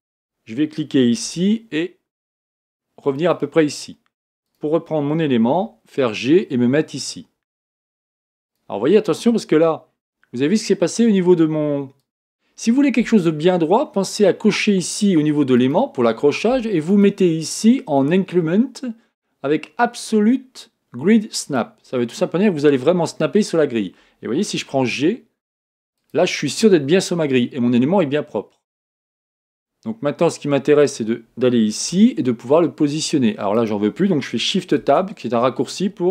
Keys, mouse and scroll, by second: 0.1 click, 1.3 g, 4.5 click, 5.5 g, 8.4 click, 9.5 g, 15.6 click, 16.9-19.9 drag, 24.8 g, 30.8-31.9 drag, 31.9 g, 34.8 shift+Tab.